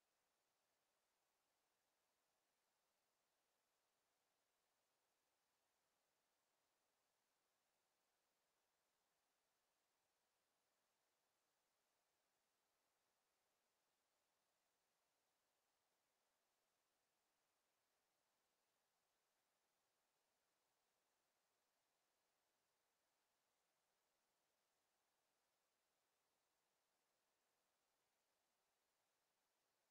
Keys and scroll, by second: 21.3 ctrl+z.